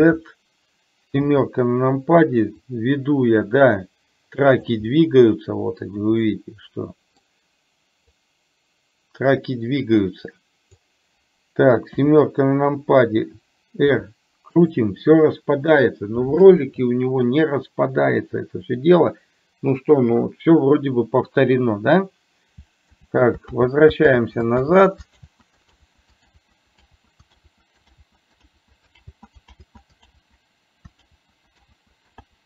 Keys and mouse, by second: 2.7-4.8 drag, 5.0-6.0 middle drag, 6.3-7.3 middle drag, 8.2-11.0 drag, 14.1 r, 23.1 ctrl+z, 23.7 ctrl+z.